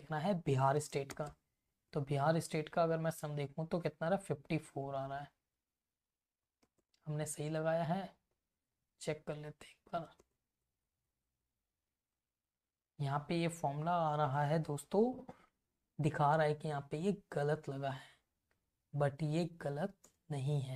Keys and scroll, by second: 0.9 space, 1.3 Return, 2.2 Right, 4.0 Up, 4.3 Left, 5.6 Down, 7.1 Up, 7.3 space, 7.5 Return, 7.8 Right, 10.4 space, 10.6 Return, 11.0 Right, 12.6 Down, 12.9 Left, 13.9 F2, 20.1 Return, 20.4 Down.